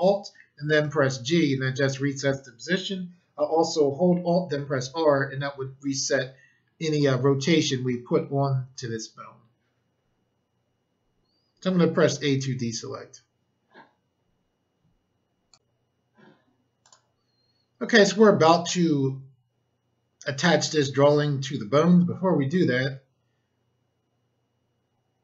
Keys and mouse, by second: 0.7 alt+g, 4.6 alt+r, 12.0 a, 15.4 click, 16.6 click, 16.8 click.